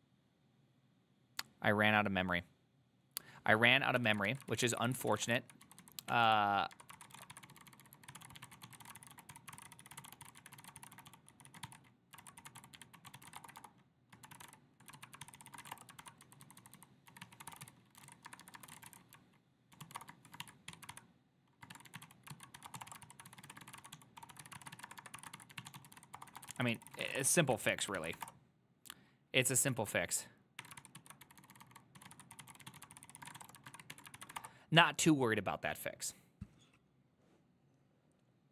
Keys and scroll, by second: 4.4-27.8 typing, 4.6 ctrl+c, 4.7 ctrl+c, 4.9 ctrl+c, 28.1 ctrl+c, 28.2 Up, 28.3 Return, 29.9 ctrl+a, 30.7-34.0 typing, 30.9 ctrl+c, 31.1 ctrl+u, 34.3 ctrl+c, 34.4 Up, 34.5 Return.